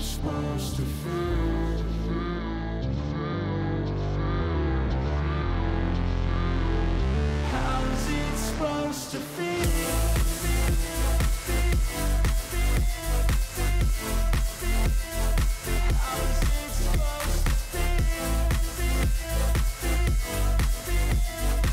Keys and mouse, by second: 1.3 click, 2.6 click, 5.0-6.1 drag, 7.1 click, 8.5 click, 11.4-12.6 drag, 13.4 click, 13.9 click, 16.6 click, 18.1 click, 20.2-21.3 drag.